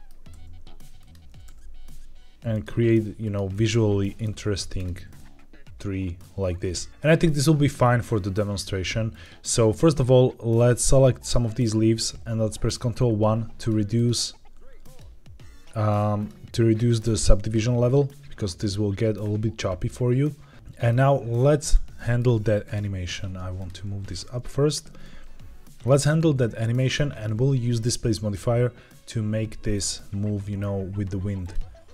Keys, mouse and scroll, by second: 0.2 r, 0.9 click, 1.2 r, 1.4 r, 2.4 click, 2.6 g, 3.1 click, 3.4-4.2 middle drag, 4.2-4.7 scroll down 2, 4.7 click, 5.1-6.1 middle drag, 6.4 scroll up 1, 6.7 middle click, 6.9 scroll down 1, 7.0-8.3 scroll up 1, 8.3 scroll up 1, 9.0 click, 12.9 ctrl+1, 13.5 click, 13.8 click, 14.3 ctrl+1, 14.7 click, 15.1 ctrl+1, 16.1 click, 20.5 middle click, 21.5 click, 21.8 middle drag, 22.5 click, 23.2 Tab, 23.5 click, 23.8 g, 24.6 click, 24.7 Tab, 24.9-25.8 middle drag, 26.1-26.8 scroll down 1, 29.7-30.5 middle drag, 31.3 click, 31.7 r.